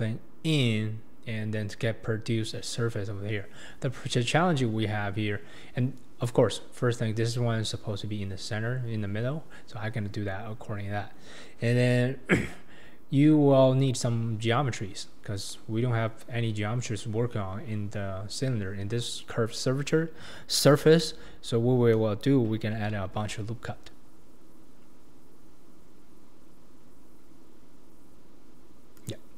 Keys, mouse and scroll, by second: 22.7 ctrl+r.